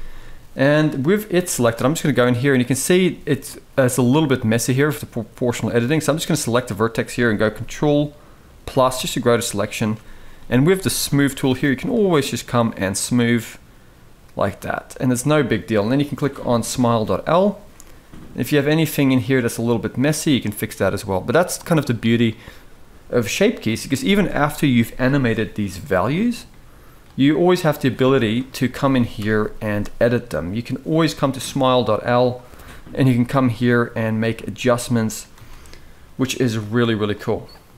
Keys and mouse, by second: 0.0 middle drag, 1.4 Tab, 1.7 middle click, 4.0-5.4 middle drag, 8.5 ctrl+KP_Add, 8.7 ctrl+KP_Add, 9.1 ctrl+KP_Add, 11.6-12.7 drag, 13.0-14.6 middle drag, 16.4 click, 16.8 middle click, 17.5-19.2 middle drag, 20.0 middle click, 21.2-21.6 drag, 25.6 click, 27.4 click, 28.9 KP_1, 31.2 Tab, 31.9 click, 32.9 g, 34.3 click, 34.5 g, 35.1 Tab, 36.4 click.